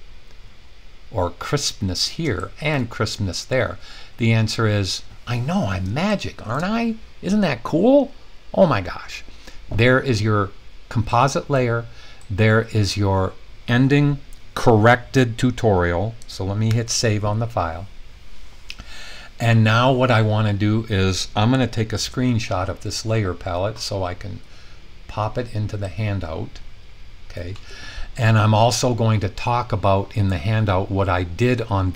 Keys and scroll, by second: 16.6 super+s, 21.7 shift+super+4.